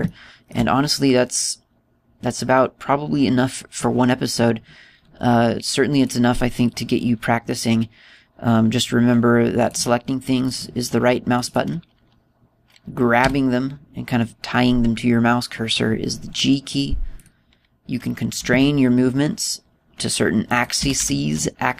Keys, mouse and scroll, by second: 1.0 shift+middle click, 1.9 middle click, 5.3 scroll down 2, 5.4 scroll up 1, 5.5 scroll down 2, 5.9-6.9 scroll up 2, 6.9 right click, 10.6 right click, 11.5 right click, 12.4 right click, 14.2 g, 18.2 click, 19.4 g, 21.6 click.